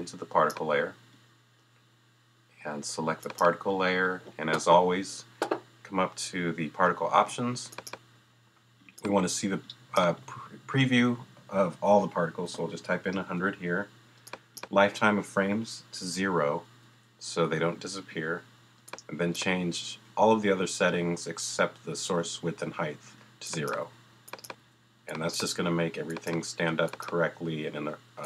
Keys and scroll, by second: 12.4 |, 13.1 0, 16.8 0, 23.8 0.